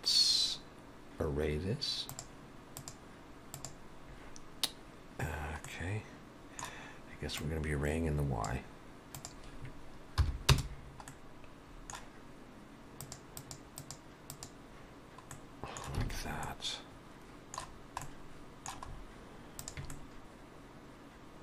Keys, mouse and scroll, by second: 2.1 click, 2.8 click, 5.7 middle click, 7.4 click, 9.2 click, 11.1 middle click, 13.1 click, 13.4 click, 13.8 click, 14.3 click, 15.4 middle click, 16.1 alt+a, 16.5 middle click, 17.7-18.1 scroll down 1, 18.1 middle click, 18.9-19.2 scroll up 3, 19.5 scroll up 1, 19.6 click, 19.9 middle click.